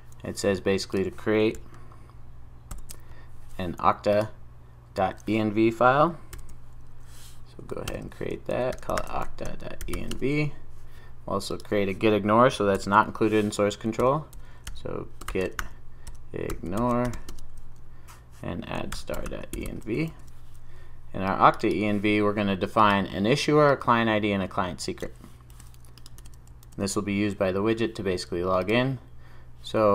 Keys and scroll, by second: 6.6 super+n, 12.8 super+n, 20.1 super+s, 26.2 super+v, 26.6 super+s.